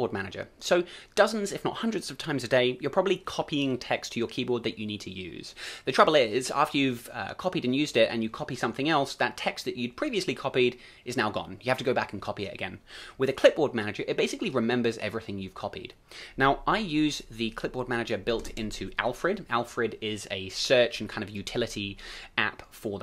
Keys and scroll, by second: 18.4 ctrl+space.